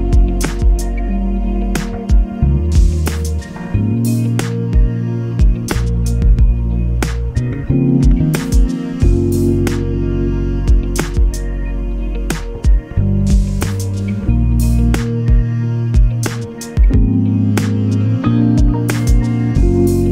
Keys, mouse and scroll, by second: 2.7-6.5 ctrl+shift+drag, 7.6 click, 8.5-10.0 drag, 10.1-10.4 ctrl+scroll up 2, 11.0-13.5 ctrl+drag, 13.5 space, 14.1 click, 15.0 shift+click, 16.0 ctrl+shift+click, 17.1 ctrl+space, 17.6 ctrl+click, 19.8 ctrl+shift+click.